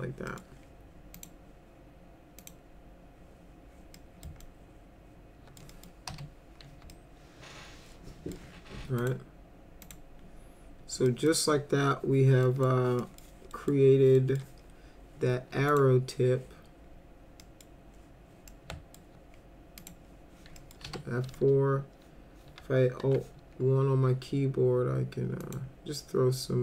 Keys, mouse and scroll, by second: 0.3 middle click, 1.1 click, 2.4 click, 4.0 middle click, 4.4-5.6 alt+middle drag, 5.7 middle click, 6.1 F4, 6.9-8.3 alt+middle drag, 9.0 click, 9.8 click, 11.1 middle click, 12.4 middle click, 13.0 middle click, 13.5 middle click, 14.2 middle click, 15.7 click, 17.4 middle click, 18.5-19.0 alt+middle drag, 19.8 click, 20.6 middle click, 20.8 F4, 23.0 alt+1, 25.4 click.